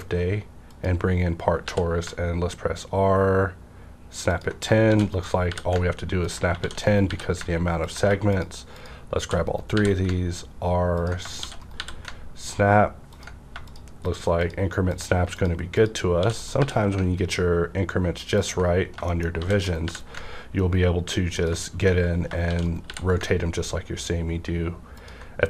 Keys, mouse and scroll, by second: 0.6 click, 1.6 r, 4.8 shift+d, 5.1 right click, 5.4 r, 6.1 ctrl+click, 6.5 shift+d, 7.0 right click, 7.0 r, 7.8 ctrl+click, 8.3 shift+click, 9.2 shift+d, 9.7 right click, 9.7 r, 11.0 ctrl+click, 11.4 shift+d, 11.6 shift+right click, 11.7 shift+r, 13.1 ctrl+click, 13.7 shift+click, 16.2 shift+d, 16.4 shift+right click, 16.5 r, 18.3 ctrl+click, 18.8 scroll down 1, 18.9 ctrl+click, 19.0 shift+middle click, 19.4 shift+d, 19.6 right click, 19.6 right click, 19.6 shift+d, 19.8 r, 21.4 ctrl+click, 22.4 shift+d, 22.6 shift+right click, 22.8 r, 24.9 click, 25.0 ctrl+click, 25.0 r.